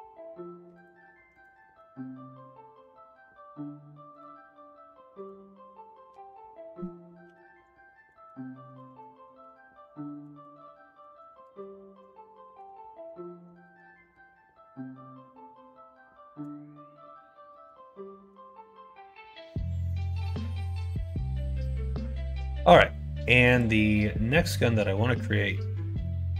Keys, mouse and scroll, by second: 1.2 click, 1.5 middle click, 4.0 click, 6.0 F2, 8.1 BackSpace, 8.4 BackSpace, 8.6 BackSpace, 10.2 BackSpace, 11.1 r, 17.4 middle click, 18.1 middle click.